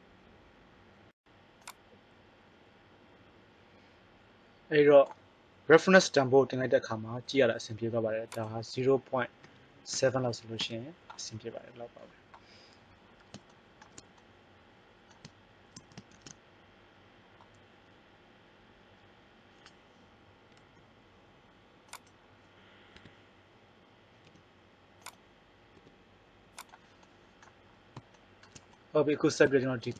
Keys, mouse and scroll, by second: 2.0-4.0 drag, 8.2-10.2 drag, 12.9 middle click, 20.3 right click, 21.8-22.8 right drag, 22.8 KP_1, 24.2 g, 25.7 r.